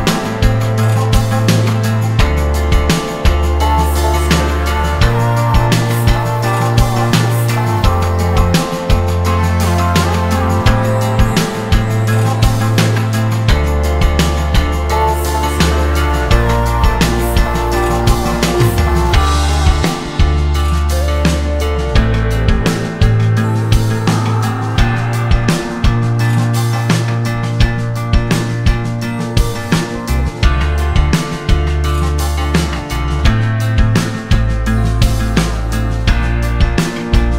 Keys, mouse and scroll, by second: 1.2-3.3 drag, 3.9 click, 4.5-6.1 drag, 6.1 scroll up 2, 6.5 click, 7.6 click, 8.6-12.2 drag, 13.5-14.6 drag, 15.6-16.0 scroll down 1, 16.2 click, 17.1-18.3 drag, 20.9-22.2 scroll down 4, 22.3 click, 22.8 click, 27.6 click, 27.9 scroll down 1, 29.2 scroll down 1, 30.5 ctrl+z, 31.3 ctrl+z, 32.5-34.3 drag, 37.1 click.